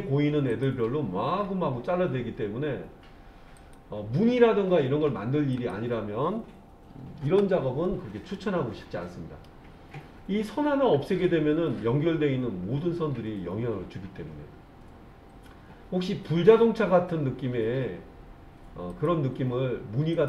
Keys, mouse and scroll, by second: 0.5-7.3 drag, 8.3-9.5 middle drag, 14.5-17.6 scroll down 1, 18.9-20.2 drag.